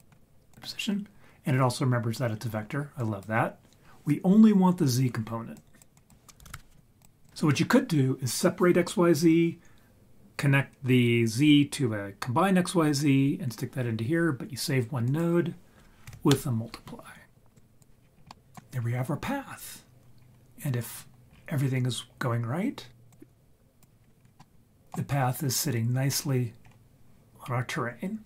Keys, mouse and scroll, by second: 3.0 click, 5.5 click, 5.9-7.0 drag, 7.2 click, 15.0-17.0 drag, 17.5 click, 18.0-18.4 scroll down 5, 18.4 middle drag, 18.7 scroll up 1, 18.8 scroll down 1, 20.2 scroll down 2, 20.8-21.4 scroll down 6, 23.1 click, 24.0 scroll up 2, 24.2 scroll down 1, 24.4-24.9 middle drag, 25.2-25.5 scroll down 2, 26.1-26.8 scroll up 5.